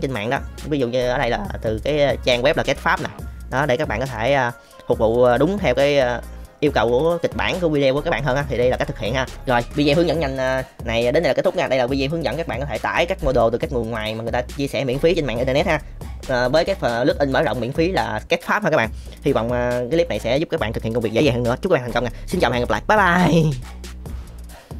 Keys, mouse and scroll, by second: 3.5 middle click, 4.1-4.5 middle drag, 8.3 middle click.